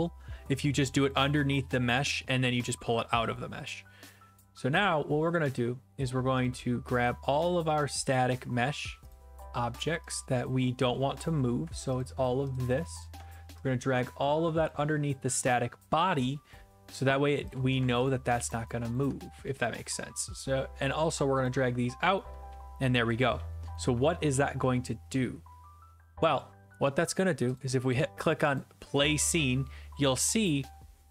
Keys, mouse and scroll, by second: 1.1 click, 2.1-3.0 d, 3.0 e, 3.3 right click, 6.5 click, 8.1 click, 9.1 click, 10.1 click, 11.1 click, 11.3 click, 12.0 ctrl+click, 14.7 click, 17.5 click, 18.1 ctrl+click, 18.5 ctrl+click, 21.4 click, 22.1-23.8 typing, 23.7-24.8 right drag, 24.9-26.9 middle drag, 24.9-26.9 scroll, 26.9 scroll, 27.6 click, 28.6 click.